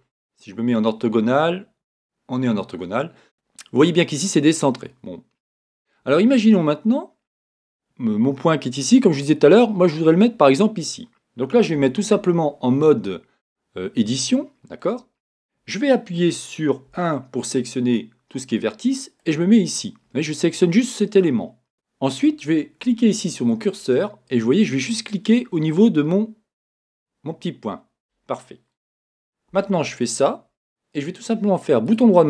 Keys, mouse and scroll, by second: 6.6 scroll, 21.7 Tab, 21.7-26.7 right drag, 26.7 click, 29.5 Tab.